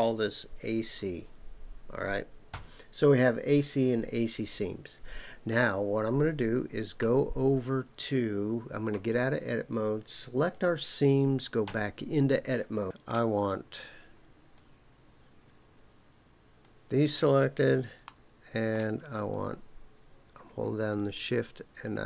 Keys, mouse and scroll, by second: 8.9 Tab, 10.4 click, 11.6 Tab, 12.8 middle click, 12.8 click, 14.5-16.6 drag, 18.1 shift+middle click, 19.3-22.0 shift+drag.